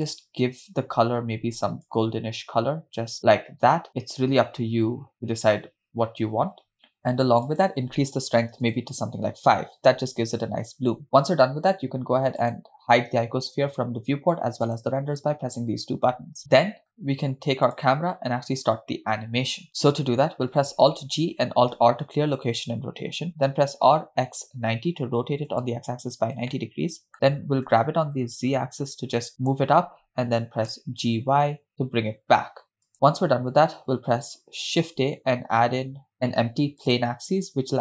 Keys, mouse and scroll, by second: 7.5-8.9 drag, 12.6 click, 14.9 click, 17.7-18.2 drag, 20.8 alt+g, 22.0 alt+r, 23.5 r, 26.6-27.1 middle drag, 27.7 g, 30.5 g, 34.8 shift+a.